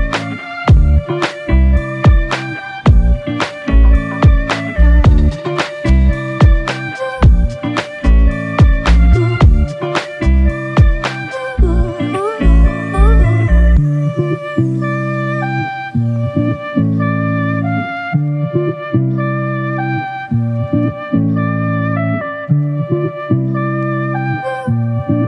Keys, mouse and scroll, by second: 1.9 alt+click, 4.6 f, 8.8 shift+click, 11.8 ctrl+alt+click, 12.6 shift+click, 13.4 alt+click, 15.0 ctrl+click, 17.5 shift+click, 18.7 double click, 19.2 ctrl+click, 20.3 shift+click, 22.3 ctrl+click, 23.9 alt+click.